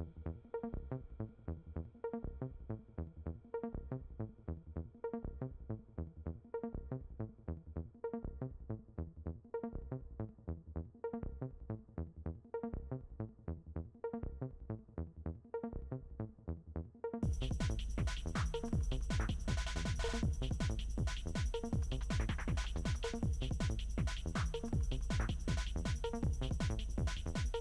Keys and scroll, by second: 14.7 ctrl+d.